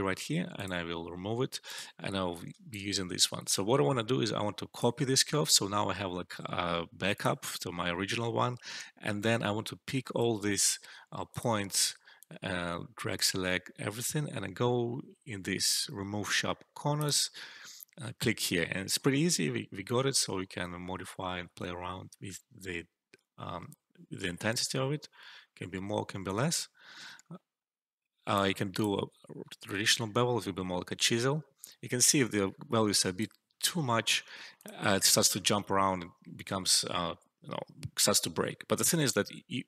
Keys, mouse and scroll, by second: 2.5-2.8 alt+shift+click, 4.6 typing, 7.0 click, 9.4 typing, 11.2-15.6 drag, 11.9-13.3 typing, 16.9 click, 19.7-28.5 drag.